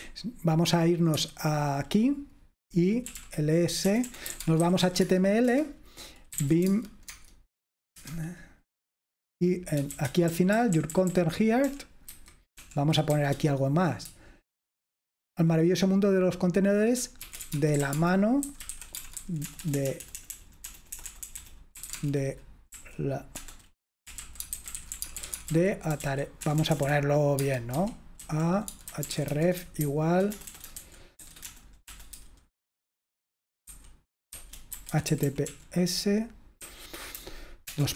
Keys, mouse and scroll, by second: 0.0 super+7, 1.2 super+8, 2.9-8.5 typing, 5.5 Return, 7.2 Tab, 9.7-13.2 typing, 17.0-32.4 typing, 33.8-37.9 typing.